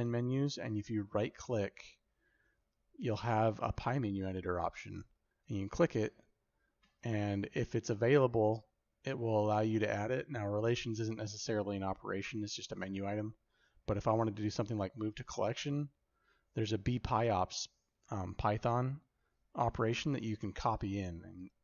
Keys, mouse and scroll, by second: 11.5-21.6 drag.